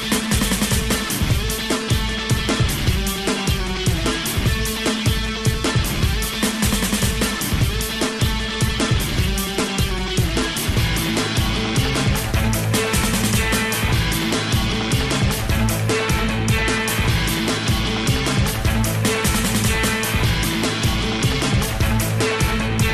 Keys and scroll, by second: 16.4 ].